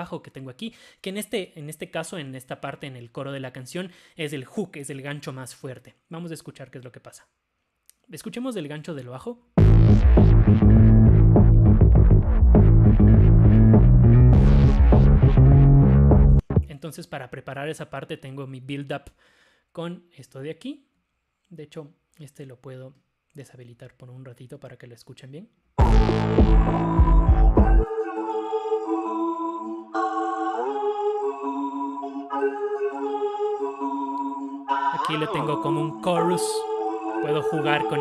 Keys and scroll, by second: 23.1 0.